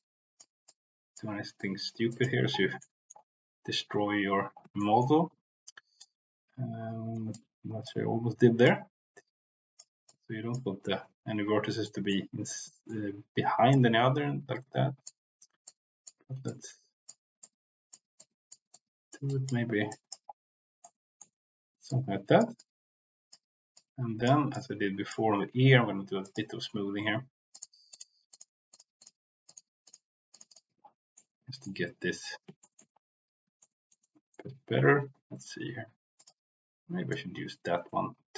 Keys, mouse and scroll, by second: 0.6 click, 1.5 click, 2.0 click, 2.8 middle click, 4.8 shift+middle click, 6.0-7.1 drag, 7.3 click, 8.6-9.8 drag, 10.0 click, 10.9 ctrl+z, 11.8 middle click, 12.7 shift+middle click, 13.6-15.0 drag, 15.6 click, 16.4 click, 17.3 click, 18.1 click, 18.6 click, 19.3 click, 19.9 click, 20.8 middle click, 21.8 click, 22.5 click, 23.7 click, 24.5 middle click, 26.2 click, 27.5 middle click, 27.8 click, 28.2 click, 28.7 click, 28.9 click, 29.4 click, 29.8 click, 30.3 click, 30.5 middle click, 31.1 middle click, 32.5 shift+middle click, 33.6 shift+middle click, 34.0 shift+middle click, 36.1 click, 37.0-38.3 drag.